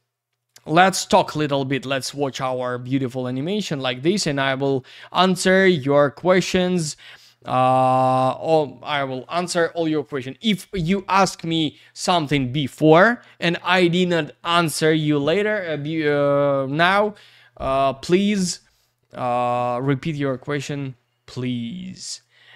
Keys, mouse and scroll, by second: 0.5 click, 2.9 click, 5.4-6.2 scroll up 1, 6.2-8.5 scroll down 1, 13.0-14.8 scroll up 1, 22.2 click.